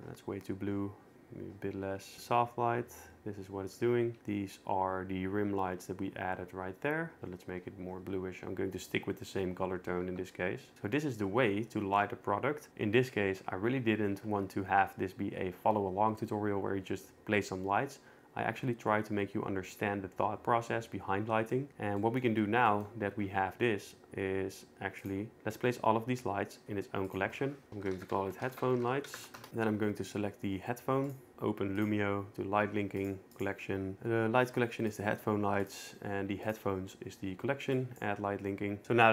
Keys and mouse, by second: 2.1-4.3 typing, 4.1 Right, 7.2 shift+q, 10.4 q, 10.7 ctrl+s, 21.5 middle click, 22.0 middle click, 25.0 click, 25.4 m, 26.6 m, 29.4 Return, 31.3 Return, 31.3 n, 31.8 click, 33.0 click, 33.4-35.1 drag, 35.7 click, 38.0 click.